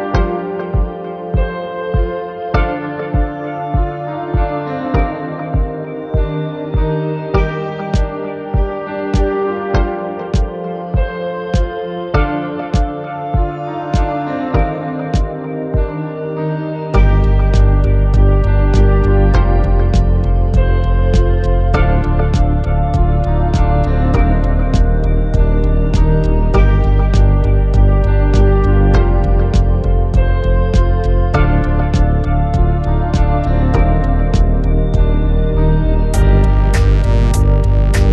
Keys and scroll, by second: 4.5 alt+c, 13.4 1, 21.8-24.4 typing, 26.3 m.